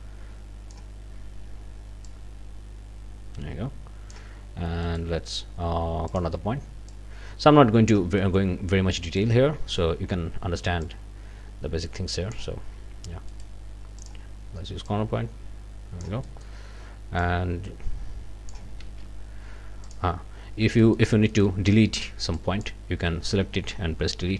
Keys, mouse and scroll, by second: 2.1-4.3 drag, 4.9 right click, 6.1 click, 6.9-8.1 drag, 8.2 click, 9.2 click, 10.8-12.5 drag, 13.3 right click, 14.0 click, 14.9-16.2 drag, 16.4 click, 17.2-18.7 drag, 18.9 ctrl+z, 19.8 click, 20.8 scroll up 1, 20.8 middle click, 21.3 middle click, 21.5 click, 21.7 scroll down 2, 22.3 click, 24.2 Delete.